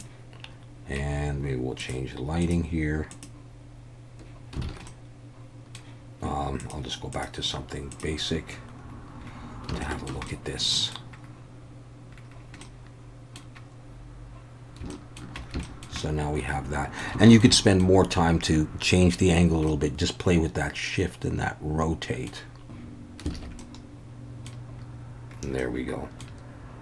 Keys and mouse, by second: 0.0 click, 1.8-4.3 drag, 4.7 alt+a, 4.9-5.7 middle drag, 6.6-8.4 drag, 9.9 alt+middle drag, 10.3-10.9 middle drag, 12.6-13.4 middle drag, 14.9-15.2 shift+middle drag, 15.6 shift+middle drag, 16.0-17.0 middle drag, 17.2 shift+middle drag, 17.6 middle click, 19.7-22.7 middle drag, 23.3 alt+a, 23.6-24.5 middle drag, 25.6-26.2 middle drag.